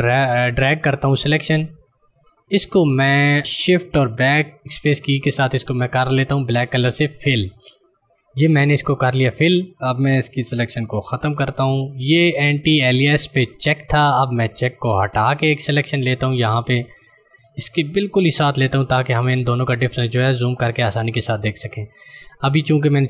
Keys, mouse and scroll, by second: 0.9 click, 4.6 BackSpace, 6.7 click, 11.1 ctrl+d, 15.1 click.